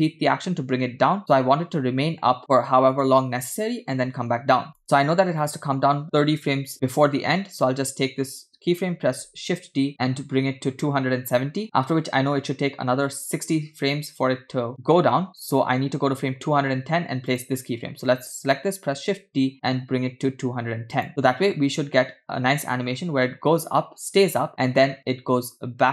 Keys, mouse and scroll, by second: 4.7 click, 9.2 shift+d, 17.3 click, 19.0 shift+d, 21.2 space.